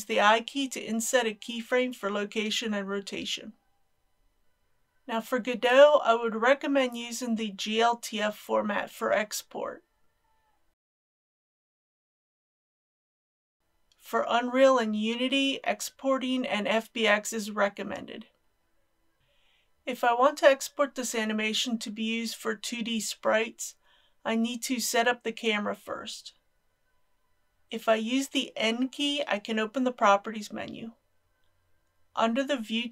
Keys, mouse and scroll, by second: 0.6 i, 1.7 click, 4.7 ctrl+s, 7.2 click, 19.2 scroll down 1, 27.5 n.